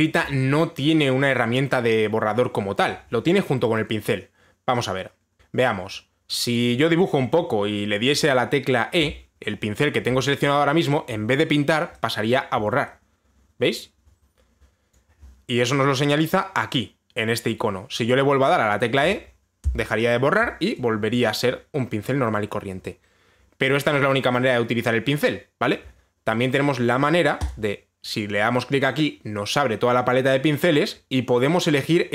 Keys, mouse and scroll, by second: 7.9 click, 9.7 e, 15.6 click, 19.7 e, 23.1 click, 28.1 click.